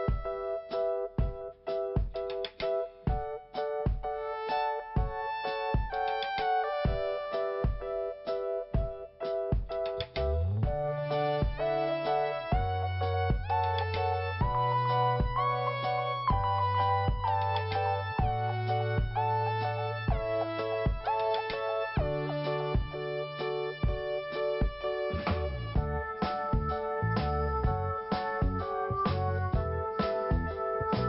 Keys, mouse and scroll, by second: 0.7 middle click, 1.4 scroll up 1, 9.4-10.4 scroll down 1, 10.4 click, 11.9 click, 11.9 click, 12.7 click, 14.6 click, 14.8 click, 16.2 click, 16.3 click, 18.1 click, 19.7 click, 19.7 click, 20.5-20.9 scroll down 1, 23.7 scroll up 1, 24.8 scroll up 1, 28.0 t, 28.8 t, 30.9-31.0 scroll down 1.